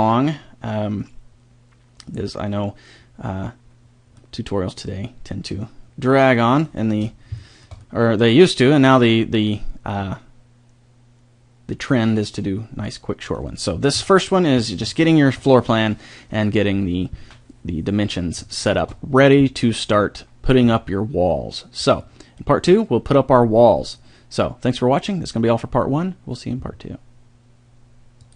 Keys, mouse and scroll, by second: 4.2-5.9 middle drag, 6.8-9.6 middle drag, 12.9-14.0 middle drag, 14.0 KP_7, 14.9-15.3 middle drag, 16.7-17.1 middle drag, 18.1-20.4 middle drag.